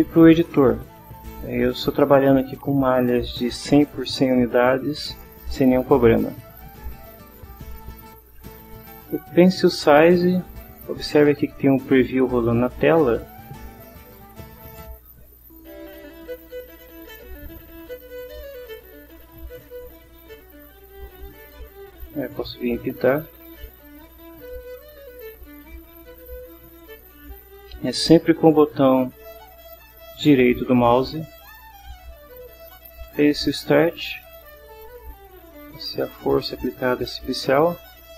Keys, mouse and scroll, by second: 14.9-16.1 drag, 18.8 click, 19.5 scroll up 1, 22.4-26.0 right drag, 33.0-34.4 drag, 34.7-36.8 right drag.